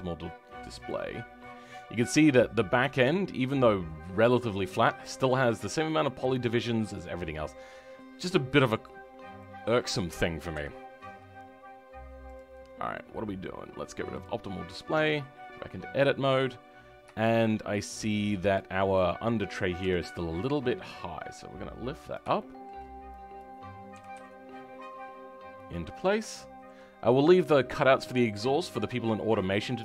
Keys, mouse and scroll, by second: 1.3-4.3 middle drag, 8.8-9.3 scroll down 4, 9.3-10.5 middle drag, 10.5 KP_3, 10.9-12.2 scroll up 2, 12.2 click, 12.7-14.0 scroll up 2, 14.0-16.7 drag, 16.7-17.1 scroll up 2, 17.1-18.5 shift+middle drag, 18.5 click, 19.8 g, 22.3-23.3 shift+middle drag, 23.3 click, 23.9 g, 25.9-26.3 scroll down 2, 26.3-29.8 shift+middle drag.